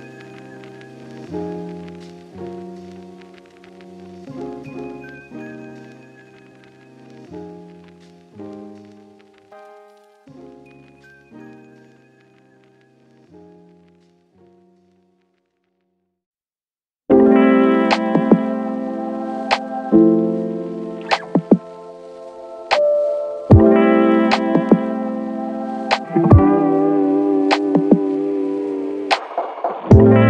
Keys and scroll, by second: 18.5 2, 18.7 Return, 23.9-24.8 typing.